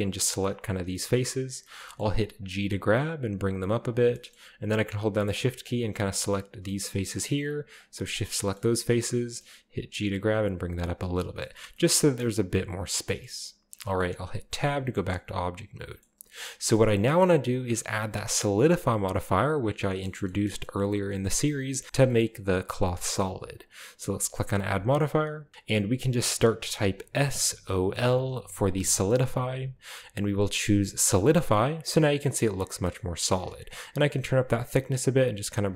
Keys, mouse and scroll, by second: 0.0 shift+right click, 0.3 shift+right click, 0.7 shift+right click, 0.9-2.5 shift+middle drag, 0.9-1.6 shift+scroll down 1, 2.5 g, 3.9 click, 4.9 shift+right click, 5.3-6.7 shift+middle drag, 7.2-8.4 shift+middle drag, 9.7 g, 10.7 drag, 10.9-11.9 middle drag, 10.9-11.9 scroll down 2, 12.2 middle click, 12.3 right click, 12.3 g, 13.3 right click, 13.5-14.5 middle drag, 13.6-14.5 scroll up 1, 14.6 g, 14.8-15.7 shift+middle drag, 14.8-15.7 scroll down 1, 16.2-17.5 shift+middle drag, 16.2-17.5 scroll up 2, 19.0-20.0 scroll down 2, 19.1 middle click, 20.1-21.1 shift+middle drag, 21.0-21.9 scroll up 1, 21.2-21.9 middle drag, 24.1 click, 26.6-27.9 typing, 30.6 click, 31.2-32.2 middle drag, 32.3 scroll down 2, 32.5-33.7 middle drag, 33.0 scroll up 2, 34.0 shift+click, 34.3-35.7 shift+middle drag.